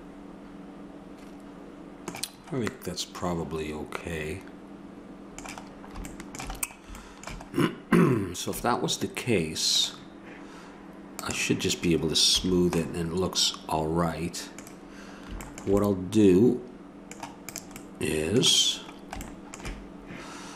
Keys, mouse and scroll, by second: 2.7-4.7 middle drag, 6.6-8.5 middle drag, 9.7-13.0 drag, 12.4 a, 17.4-19.3 drag, 19.3-20.5 middle drag.